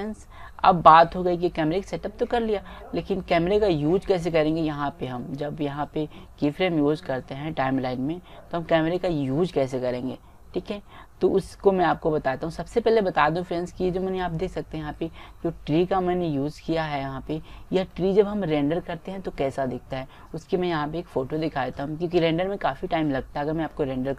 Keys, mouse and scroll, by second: 6.7-8.4 drag, 13.1-16.5 middle drag.